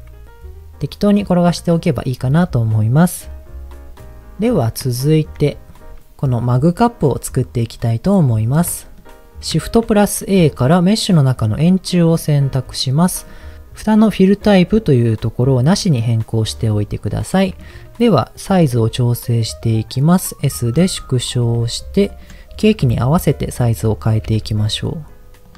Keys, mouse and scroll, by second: 1.4 click, 2.2 middle click, 5.2 shift+middle click, 8.2 click, 9.2 shift+middle click, 9.8 shift+a, 12.4-12.8 scroll down 2, 15.0-16.2 drag, 17.0 middle click, 18.8 s, 20.4 click, 20.7-21.4 scroll up 4, 21.4 s, 22.1 click, 22.8 KP_1, 23.7 s, 24.0 click, 24.2 g, 25.4 click.